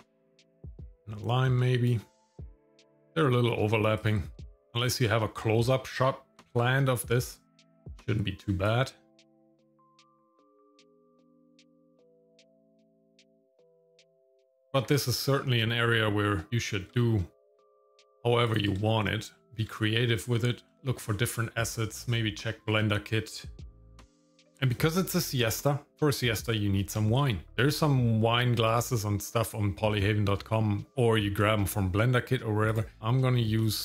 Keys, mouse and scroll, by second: 0.2 click, 0.9 click, 2.4 click, 2.7 shift+middle click, 3.0 g, 4.4 shift+middle click, 4.7 middle click, 5.2 shift+middle click, 6.4 g, 7.8 shift+middle click, 8.6 click, 9.3 shift+middle click, 9.6 g, 9.9 g, 10.4 g, 10.7 shift+middle click, 10.9 middle click, 11.0 g, 11.2 middle click, 11.5 click, 12.2 shift+middle click, 12.4 shift+middle click, 12.6 scroll down 2, 12.6 shift+middle click, 12.8 scroll up 2, 12.9 shift+middle click, 13.2 g, 13.5 shift+middle click, 14.0 click, 14.9 g, 16.5 shift+middle click, 17.5 g, 18.8 shift+middle click, 20.0-20.6 scroll down 2, 20.8 shift+middle click, 21.1 middle click, 21.8 scroll down 1, 22.0 shift+middle click, 24.1 click, 32.9 click, 33.6 click.